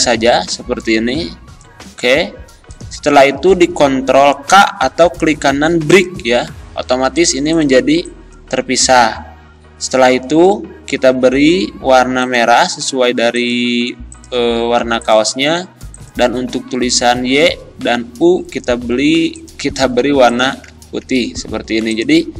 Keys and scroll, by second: 8.8 ctrl+z.